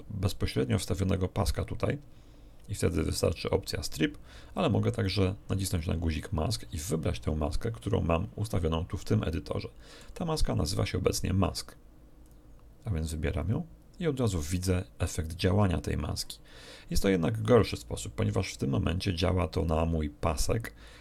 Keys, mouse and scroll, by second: 5.6 click, 9.0-10.2 middle drag, 12.2 click, 13.4 click.